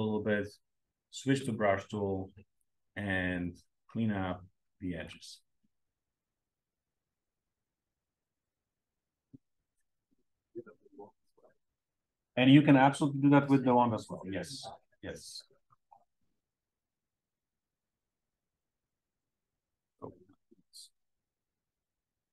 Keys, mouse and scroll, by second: 0.1 b, 2.6-5.3 alt+drag.